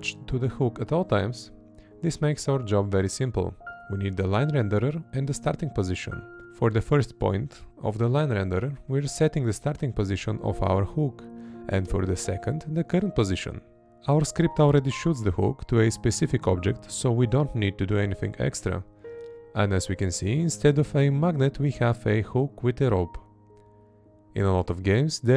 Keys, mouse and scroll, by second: 1.0 Right, 2.2 space, 2.5 Left, 4.3 space, 5.0 Up, 6.0-9.4 drag, 6.8 Down, 7.7 Right, 8.3 Down, 9.1 space, 9.4 Left, 11.1 space, 11.9 Up, 14.0 Down, 14.5 Right, 15.8 space, 16.1 Left, 17.8 space, 20.3 Right, 21.5 space, 21.8 Left, 24.7 Right.